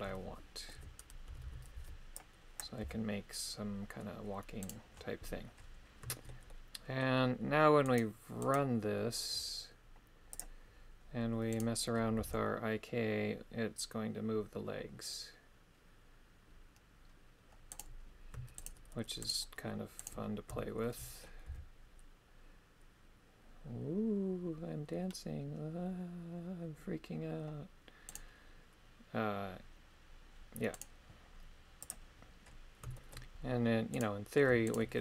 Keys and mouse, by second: 0.7 KP_3, 1.3 a, 1.4 a, 1.8 b, 2.8 g, 6.1 shift+middle click, 6.5 middle click, 7.9 right click, 8.4 right click, 10.3 click, 11.6 right click, 12.2 g, 19.3 shift+right click, 20.0 shift+right click, 20.6 shift+middle click, 21.5 g, 30.8 right click, 31.8 click, 34.7 shift+right click.